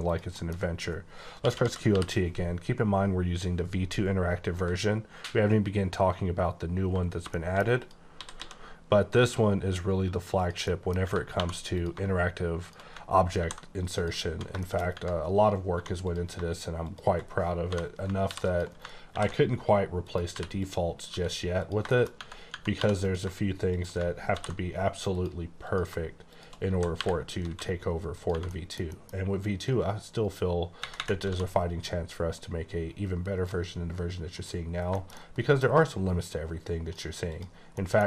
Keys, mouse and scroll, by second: 0.1 shift+click, 0.4 shift+middle click, 1.3-1.8 typing, 5.0-6.5 ctrl+scroll down 6, 6.5-7.1 ctrl+scroll up 1, 7.1 scroll up 1, 7.3 shift+middle click, 7.8 click, 8.2 typing, 10.4 click, 10.7 middle click, 11.0 Tab, 11.3 2, 11.8 click, 13.4 ctrl+b, 14.0 click, 14.2 Tab, 14.6 shift+middle click, 14.8 shift+scroll up 3, 14.9 Tab, 15.8 1, 16.0 click, 18.2 ctrl+r, 18.5 ctrl+click, 18.7 right click, 19.1 ctrl+b, 20.0 click, 20.2 3, 20.5 click, 21.0 e, 21.6 click, 21.9 middle click, 22.2 Tab, 22.5 Tab, 22.8 2, 22.9 click, 23.7 shift+click, 24.2 ctrl+b, 25.1 click, 25.6 click, 26.7-27.5 typing, 28.2 click, 28.5 middle click, 29.1 double middle click, 29.6 click, 31.3 d, 32.3 click, 34.3 click, 34.4 click, 34.7 scroll down 3, 35.0 shift+middle click, 35.6 scroll, 35.7-36.3 scroll up 3, 36.3 click, 37.3 click, 37.6 scroll down 3, 37.8 middle click, 38.0 scroll up 2.